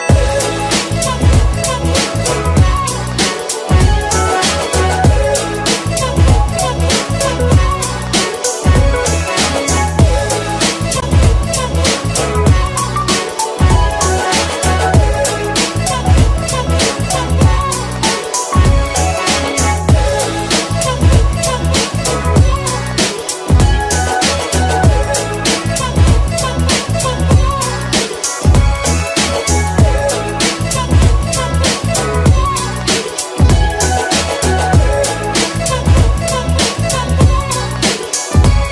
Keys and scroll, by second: 3.2-3.6 typing, 4.0 Return, 6.1 `, 6.2 space, 8.2 5, 8.6 Return, 10.4 F5, 12.6 5, 12.7 Return, 16.0 space, 18.1 3, 18.4 Return, 29.2 space, 29.6 ctrl+k.